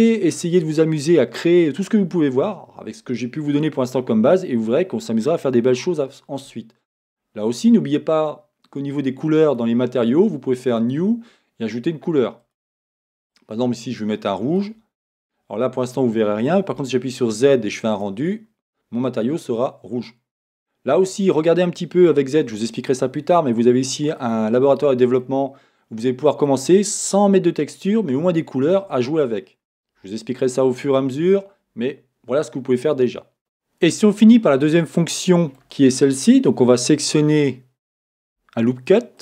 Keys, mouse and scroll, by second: 9.5 click, 10.8-12.4 drag, 12.5 click, 15.7-17.0 middle drag, 16.8 z, 19.6 middle click, 22.2-39.2 middle drag, 22.2 z, 32.6-33.1 scroll down 2.